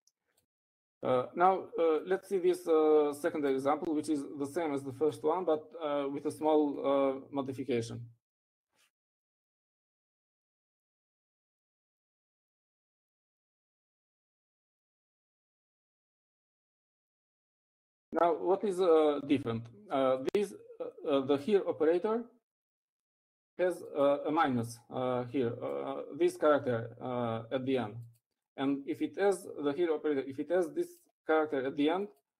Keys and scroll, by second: 8.4 Up, 9.3 Down, 10.5-15.3 typing, 16.4 typing.